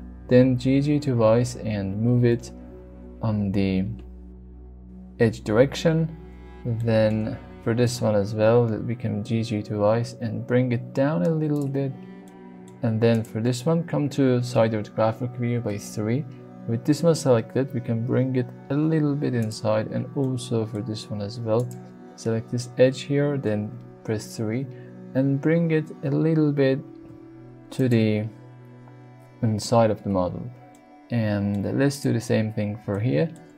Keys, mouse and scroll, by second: 0.1 g, 0.2 g, 4.4 shift+click, 6.8 shift+middle click, 7.8 click, 8.7 g, 8.9 g, 11.5 click, 12.2 middle click, 13.1 click, 14.5 KP_3, 15.6 shift+middle click, 17.7 g, 19.4 click, 20.2 middle click, 21.6-23.4 drag, 23.4 KP_3, 25.0 g, 26.9 y, 27.7 click, 30.7 middle click, 31.9 click, 32.9 shift+middle click.